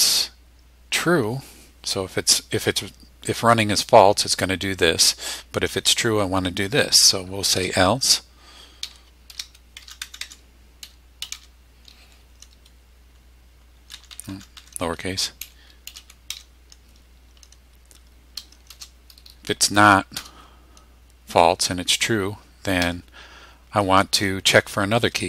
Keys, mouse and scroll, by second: 7.5 shift+e, 8.6-11.8 typing, 13.9 BackSpace, 15.2-16.8 typing, 18.7 shift+;, 20.1 Return, 22.8 Tab.